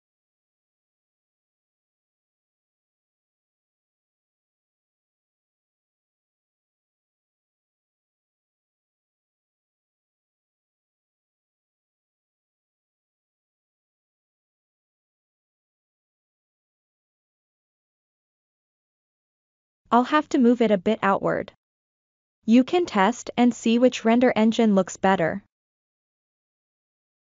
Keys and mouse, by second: 0.3 p, 1.5 Tab, 2.0 click, 2.6 Tab, 4.2 a, 5.3-6.1 ctrl+middle drag, 6.2 ctrl+middle click, 6.9 s, 7.5 click, 7.7 click, 8.5 g, 9.0-11.5 drag, 11.9 click, 12.7 Tab, 13.2 Tab, 13.2 middle click, 13.5 click, 15.6 click, 16.2-17.0 drag, 18.3-18.8 middle drag, 19.0 click, 19.3 g, 20.0 click, 20.5 click, 23.0 middle click, 23.6-24.5 ctrl+middle drag, 25.2 click, 25.3-27.1 drag.